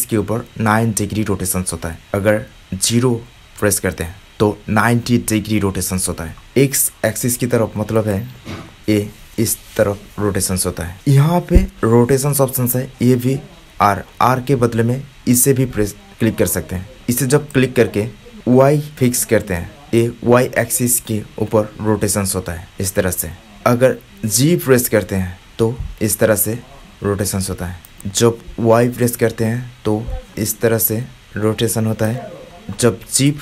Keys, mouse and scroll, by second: 4.2 x, 9.8-15.1 middle drag, 18.3-19.8 middle drag.